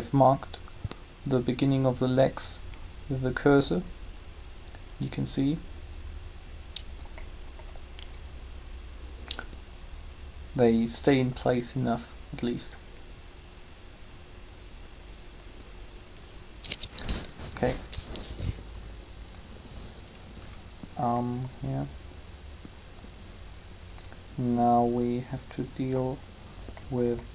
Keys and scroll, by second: 17.3 3.